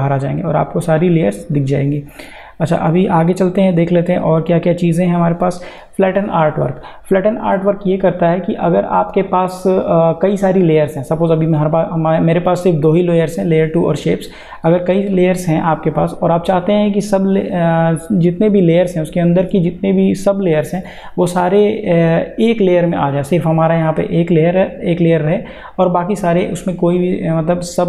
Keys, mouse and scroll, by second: 3.6 click, 7.3 click, 11.2 click, 14.5 click.